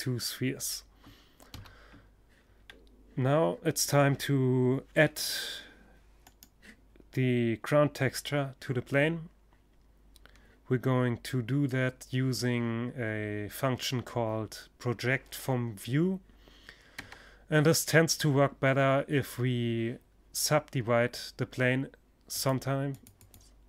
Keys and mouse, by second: 0.0 Escape, 4.7-6.5 right drag, 15.4 Tab, 20.7-23.6 drag.